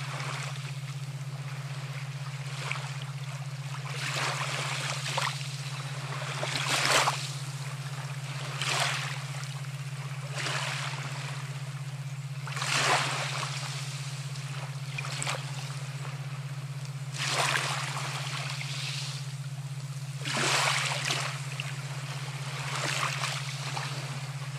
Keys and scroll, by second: 16.2-17.2 [.